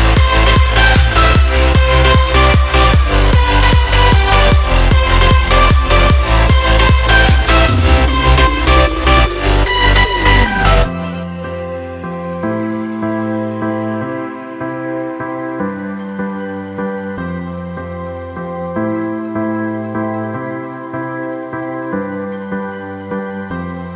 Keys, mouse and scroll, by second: 0.8 click, 1.0 click, 2.6-9.7 drag, 9.9-21.9 drag.